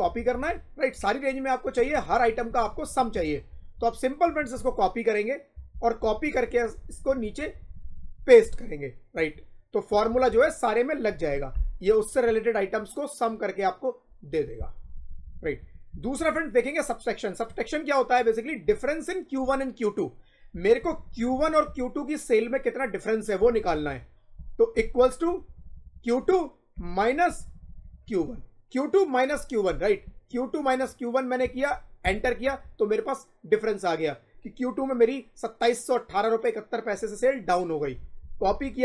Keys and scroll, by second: 0.9 Up, 2.4 Left, 3.7 Up, 4.4 ctrl+c, 5.5 Down, 6.0 shift+Down, 8.3 ctrl+v, 9.0 Up, 9.8 Down, 11.0 F2, 14.7 Escape, 15.0 Up, 15.8 Right, 16.1 Up, 18.5 Down, 20.4 Down, 20.7 Left, 21.5 Right, 23.3 Right, 24.6 =, 25.2 Left, 26.7 -, 27.2 Left, 31.9 Return, 32.3 Up, 38.1 ctrl+c, 38.5 shift+Down.